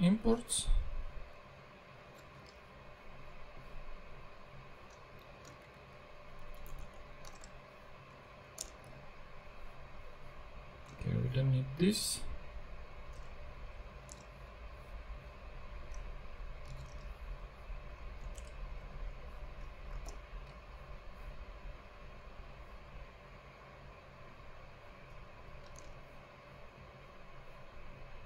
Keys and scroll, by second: 2.2 super+c, 2.4 super+Tab, 5.0 Left, 5.5 shift+Up, 6.4 shift+Down, 7.3 shift+Return, 8.1 Up, 8.6 Return, 8.8 super+v, 11.0 super+x, 13.1 BackSpace, 14.0 super+BackSpace, 14.1 super+Tab, 16.6 super+c, 16.9 super+Tab, 18.3 Return, 18.9 super+v, 19.9 alt+super+v, 20.1 alt+super+l, 25.8 super+Tab.